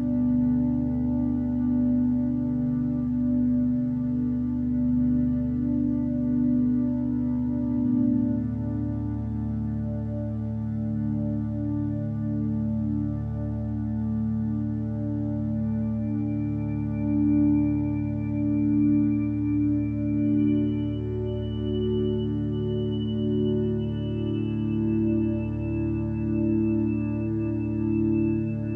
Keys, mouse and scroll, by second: 5.5 x, 6.5 ctrl+z, 10.7 ctrl+z, 13.7 ctrl+space, 15.3 ctrl+space, 22.2 ctrl+z, 26.2 ctrl+z.